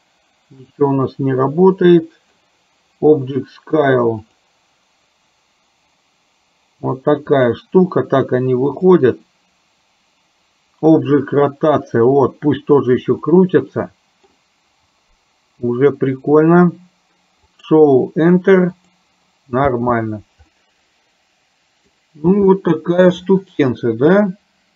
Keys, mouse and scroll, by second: 0.8 click, 2.0 middle click, 4.4 click, 7.5 click, 13.4-14.5 middle drag, 17.7 click, 18.9 click, 19.8 space, 20.6-22.1 middle drag, 22.6 shift+middle click, 23.9-24.7 middle drag.